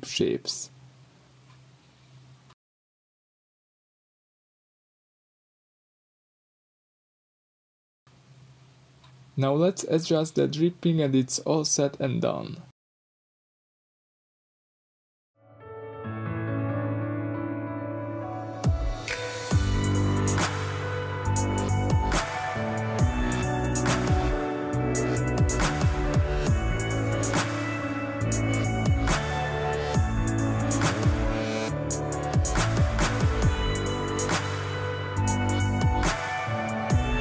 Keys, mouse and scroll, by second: 1.8 Escape, 1.9 shift+click, 3.0 g, 6.7 click, 7.0 Tab, 7.1 scroll down 2, 7.3-11.5 middle drag, 9.4 Tab, 10.5-11.5 scroll up 2, 11.5 click, 13.0 shift+click, 13.7 g, 15.1 click, 15.3 scroll down 1, 15.9-17.7 middle drag, 17.7 click, 18.4 click, 19.4 shift+click, 19.8-20.7 shift+middle drag, 20.7 shift+drag, 21.8 shift+click, 22.7 g, 25.5 click, 25.8-30.4 middle drag, 26.2 Tab, 29.1 Tab, 29.9-30.4 scroll up 2, 30.4 click, 30.6-33.8 middle drag, 31.8 g, 34.3 click, 34.8 g, 36.5 Escape, 36.9 alt+o.